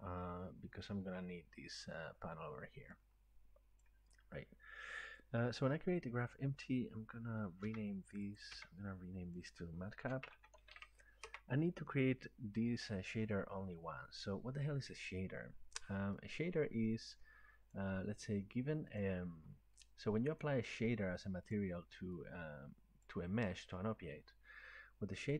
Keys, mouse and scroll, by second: 0.9 click, 3.8 click, 7.7 F2, 8.4 click, 8.6 F2, 10.0 typing, 11.3 typing, 16.1-16.9 typing, 16.5 click, 17.7 click, 19.0 click, 20.8 click, 22.2 click, 23.2 click.